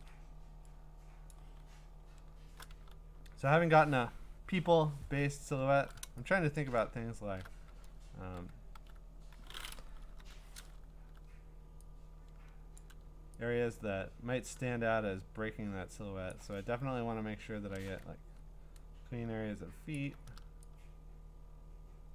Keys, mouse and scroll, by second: 1.3 click, 1.6-2.5 scroll, 2.8 q, 5.5 scroll, 6.7 click, 7.1 scroll, 8.2 q, 8.7 q, 9.6 scroll up 7, 10.2-11.4 typing, 12.8 alt+click, 16.3 alt+click, 16.8-17.5 scroll, 17.6 middle click, 19.9 scroll, 19.9 alt+click.